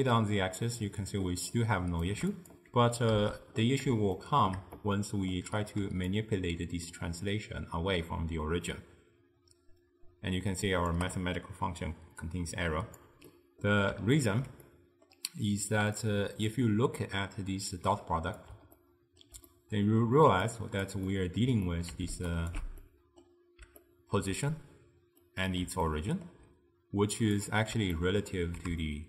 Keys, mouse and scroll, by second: 4.2-6.2 shift+middle drag, 6.2-9.3 shift+drag, 12.3 click, 13.4-16.1 middle drag, 16.1 click, 18.8-20.6 ctrl+middle drag, 20.6 click, 21.1-22.4 middle drag, 22.4 ctrl+alt+right click, 22.9-26.3 middle drag, 27.2 click, 28.0-29.0 ctrl+middle drag.